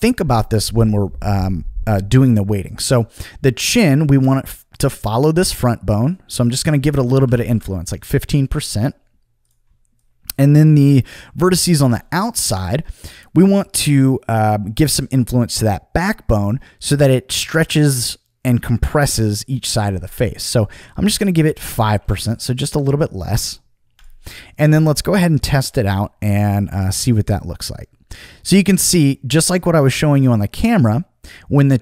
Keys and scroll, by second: 6.9-7.7 typing, 22.0 5, 22.0 Return.